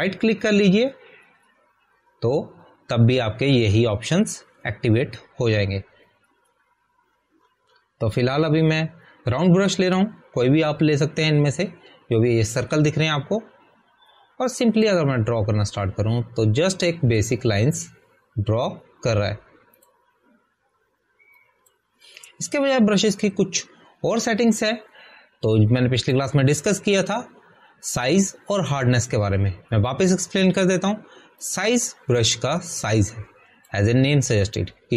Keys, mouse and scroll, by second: 1.7 [, 1.8 right click, 7.2 right click, 7.2 scroll down 1, 8.9 scroll up 1, 16.8 scroll up 1, 16.9 click, 20.3 ctrl+z, 21.7 ctrl+z, 21.8 click, 28.1 click, 33.4 click.